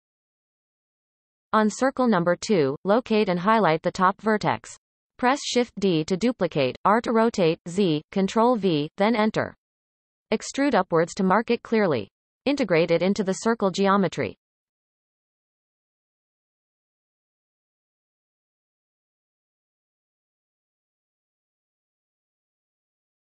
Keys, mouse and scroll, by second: 3.3-4.0 scroll up 1, 4.0 shift+middle click, 4.4-5.8 scroll up 1, 5.8 click, 6.3-6.8 shift+middle drag, 6.8-7.1 scroll up 1, 8.8 shift+d, 11.9-12.8 shift+middle drag, 12.8 e, 14.3-14.7 shift+middle drag, 14.7-15.0 scroll up 1, 15.3 click, 15.9 shift+click, 16.4 x, 18.2 click, 18.6 shift+click, 19.5 f, 20.2 click, 20.6 shift+drag, 21.5 f, 22.1-22.7 scroll down 4, 22.8-23.2 shift+middle drag.